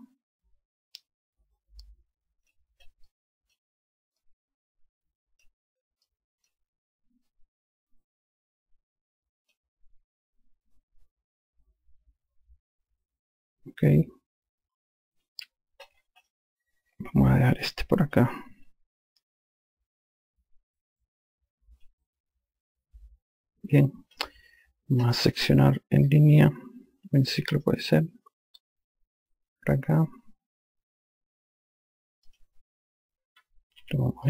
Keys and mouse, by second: 0.3 click, 3.8 click, 4.9 click, 6.8 click, 8.0 click, 17.7 click, 26.7 click, 32.7 click.